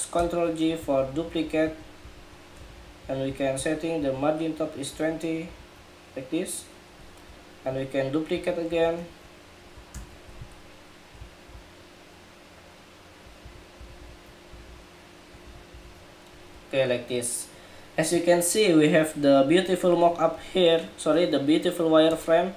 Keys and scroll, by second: 8.0 super+c, 8.6 super+v, 9.6 super+j.